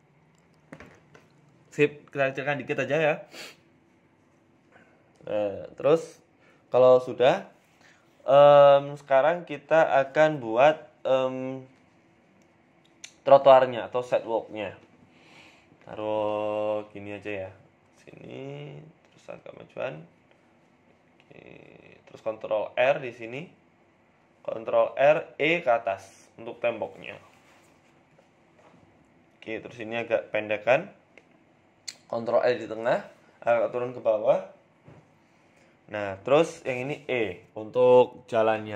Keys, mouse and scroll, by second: 0.1 s, 1.4 KP_1, 1.8-2.4 scroll up 4, 2.4 g, 5.5 shift+middle click, 5.8 scroll up 3, 6.0 shift+middle click, 6.9 shift+a, 8.1 shift+s, 8.8 shift+a, 11.4 s, 17.6 KP_3, 18.6 Tab, 19.0 Tab, 20.2 g, 21.4 s, 23.4 shift+middle click, 23.7 Tab, 24.3 ctrl+r, 26.1 click, 26.9 e, 28.3 shift+middle click, 28.7 click, 29.5 g, 31.4 shift+middle click, 31.7-32.2 scroll up 1, 32.2 ctrl+r, 32.2-32.6 scroll up 1, 33.7 g, 36.5 click, 37.4 e, 38.3 z.